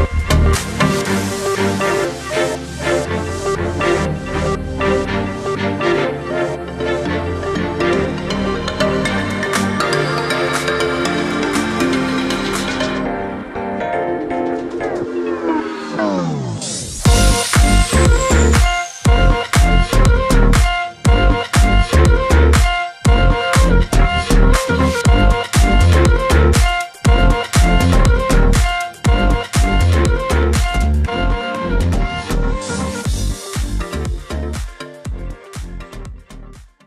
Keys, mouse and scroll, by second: 0.1-0.9 alt+scroll down 2, 1.0 alt+scroll down 2, 1.3 alt+scroll up 2, 2.0-6.0 drag, 3.7-5.3 drag, 6.3 alt+scroll down 1, 6.7-7.5 click, 8.2 alt+scroll down 1, 8.6 click, 10.6 alt+scroll up 1, 11.2 click, 12.1-13.2 typing, 13.3 ctrl+a, 14.8-17.4 typing, 18.1 click, 19.2-20.5 typing, 21.2 click, 24.8-25.9 drag, 27.4 ctrl+g, 29.3 ctrl+y, 29.5-29.9 alt+scroll down 2, 30.8 click.